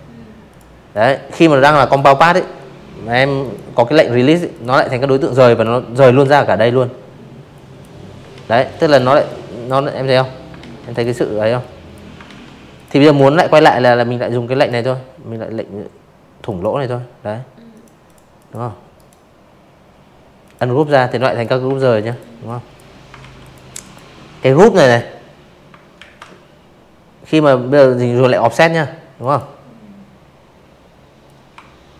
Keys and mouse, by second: 0.3 right click, 1.4 click, 2.2-2.5 drag, 3.1 ctrl+z, 4.5 drag, 5.3 ctrl+z, 5.6 click, 5.8 click, 6.2-6.6 drag, 7.5 ctrl+z, 7.8 click, 8.0 click, 8.5-8.9 drag, 9.2 ctrl+z, 9.6 click, 10.1 click, 11.5 click, 13.4 click, 14.6 click, 15.0 click, 15.3 click, 15.8 right click, 17.3 click, 17.7 click, 18.1 click, 18.7 ctrl+z, 19.0 click, 19.4 click, 20.1 ctrl+z, 20.3 click, 20.7 click, 22.9 ctrl+q, 26.1 click, 28.2 shift+click, 29.5 space, 29.7 click, 29.9 v, 30.1 click, 30.4 click, 31.7 drag.